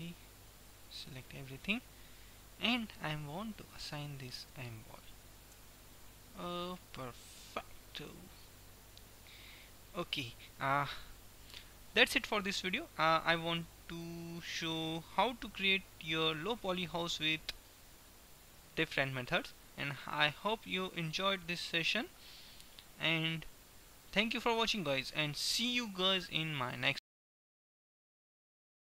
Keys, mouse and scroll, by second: 3.6-6.0 drag, 5.5 Tab, 6.0-7.8 middle drag, 13.8-17.8 middle drag, 17.8-21.1 drag, 25.5 click, 26.1-28.8 middle drag.